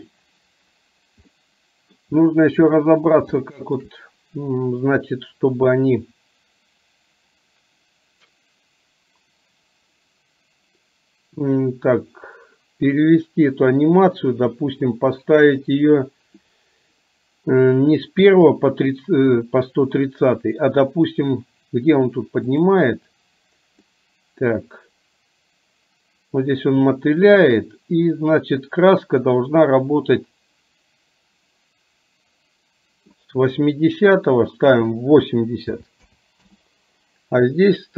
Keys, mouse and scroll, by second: 1.4-2.0 middle drag, 2.8 middle click, 3.5-3.9 shift+middle drag, 22.7 click, 24.0-33.3 drag, 34.9-36.5 drag.